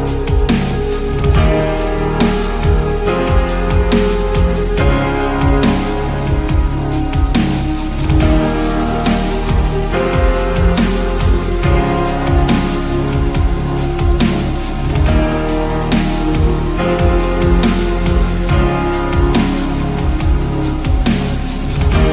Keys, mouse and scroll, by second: 0.1 click, 0.3 middle click.